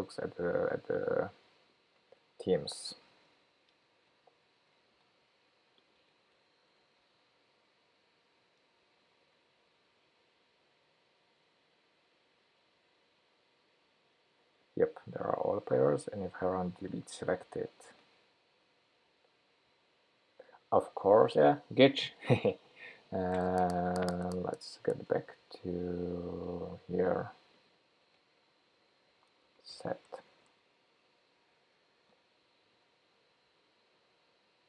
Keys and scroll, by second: 4.9 alt+shift+Right, 7.0 super+v, 30.5 Escape, 31.8 shift+super+p.